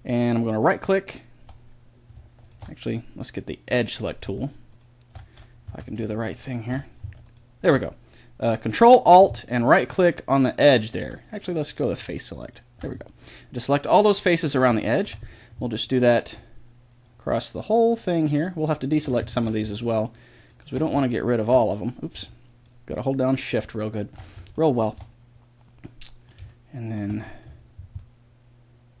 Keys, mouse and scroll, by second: 0.6-4.3 right drag, 3.7 click, 4.3-5.4 middle drag, 5.6 a, 11.7 click, 12.4-13.6 middle drag, 14.2-16.9 middle drag, 16.9-19.3 right drag, 19.3 ctrl+z, 22.8-25.7 right drag, 25.7-29.0 middle drag, 28.1 click.